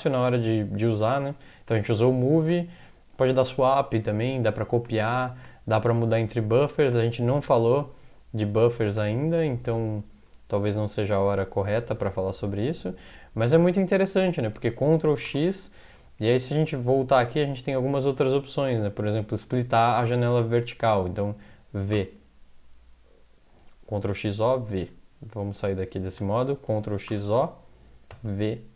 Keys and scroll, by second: 10.7 alt+Tab, 15.0 ctrl+x, 15.3 o, 16.1 alt+Tab, 20.8 alt+Tab, 22.0 v, 25.4 Escape, 26.7 ctrl+x, 27.1 typing, 28.1 typing.